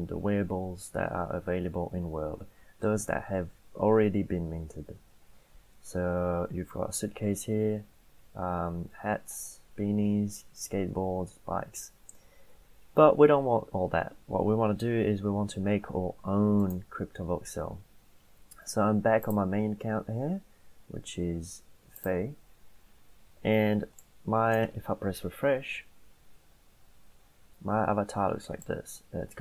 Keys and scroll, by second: 25.1 F5.